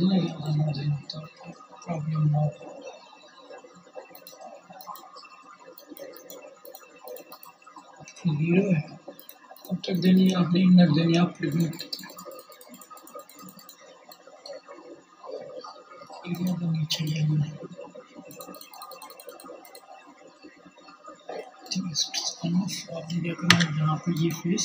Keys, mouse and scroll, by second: 21.1 Tab, 23.2 3, 23.4 click.